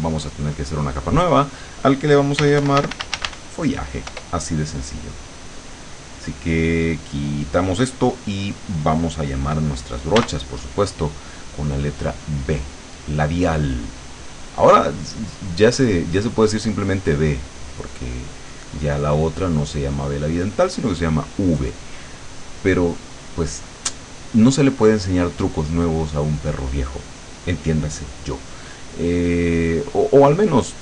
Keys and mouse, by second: 0.9 click, 2.2-3.6 typing, 4.1 Return, 7.1 click, 10.2 b, 12.4-13.8 drag, 14.5 click, 16.1 click, 17.4 click, 18.5 click, 19.2 click, 20.9-23.7 drag.